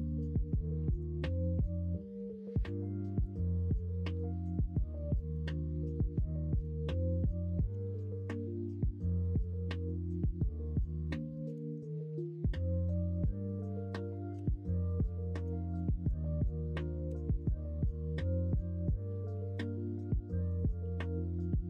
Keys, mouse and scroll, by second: 0.2 middle click, 3.4 middle click, 3.5 scroll down 1, 3.7 Tab, 4.0-5.3 middle drag, 5.7 middle click, 6.0 Tab, 6.5 middle click, 7.7 l, 8.6-9.7 middle drag, 11.4 shift+d, 13.2 p, 14.3 Tab, 17.1 ctrl+KP_Subtract.